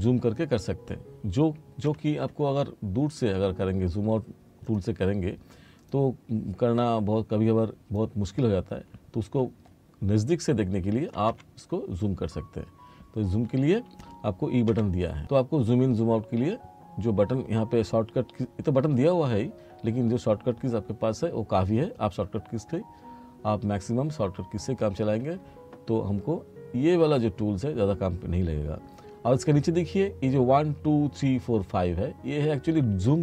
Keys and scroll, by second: 1.9 e, 11.4 e, 14.8 e.